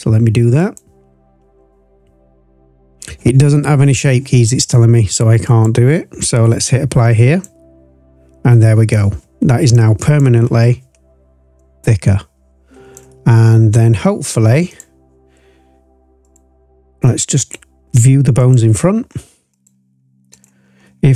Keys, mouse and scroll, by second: 0.7 click, 5.4-7.5 drag, 9.7 click, 10.4-11.5 scroll up 4, 11.5-12.9 drag, 13.1-13.5 scroll down 2, 13.5-14.0 scroll up 3, 14.7 click, 16.2 click, 17.3 click, 18.3 click, 19.5 click, 20.3 click, 20.6-21.1 scroll down 2.